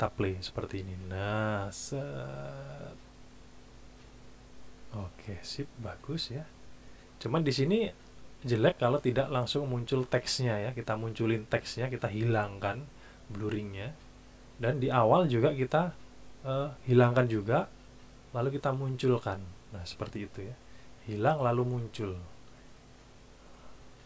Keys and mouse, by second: 0.2 click, 15.3-16.8 drag.